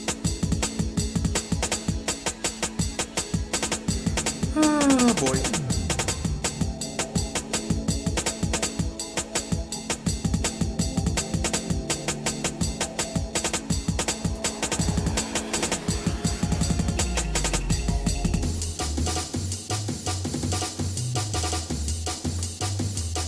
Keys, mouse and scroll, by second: 0.8-2.8 shift+middle drag, 3.3 shift+middle click, 4.5 shift+middle click, 5.5 shift+middle click, 6.1-7.0 scroll up 4, 7.5-8.0 scroll up 2, 8.2 click, 14.5 click, 17.7 scroll up 1, 18.1 click, 19.4 shift+middle click, 20.3 shift+click, 20.8 middle click, 21.6 scroll down 1, 21.6 scroll up 1, 21.9-22.4 scroll down 2, 22.4 shift+middle click, 23.0 middle click.